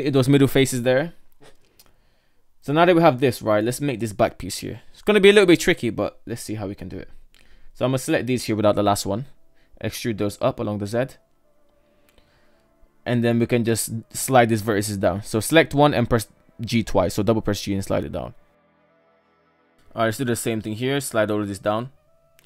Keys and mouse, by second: 3.7 KP_1, 5.5 right click, 6.0 right click, 6.8 ctrl+right click, 8.5 e, 13.6 right click, 14.7 g, 18.1 right click, 18.5 g, 21.3 right click, 21.5 shift+middle click.